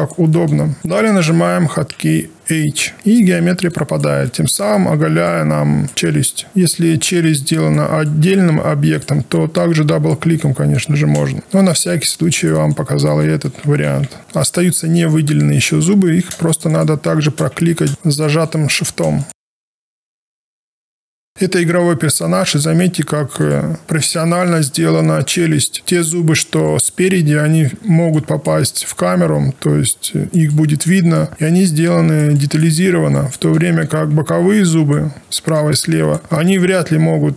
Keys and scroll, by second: 6.1 alt+1, 11.4 ctrl+shift+h, 13.8 h, 17.5 q.